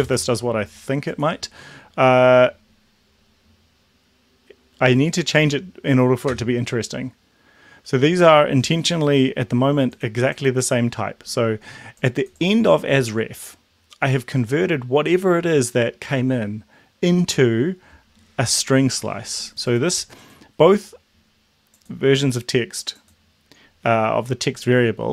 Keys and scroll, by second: 6.3 Return.